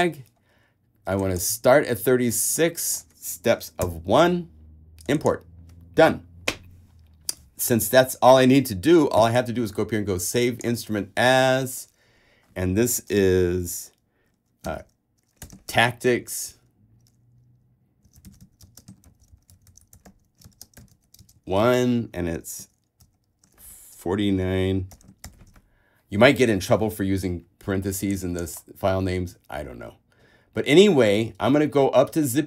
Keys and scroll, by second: 4.0 l, 14.8-21.6 typing, 22.8 shift+space, 23.2 shift+9, 24.3-25.9 typing.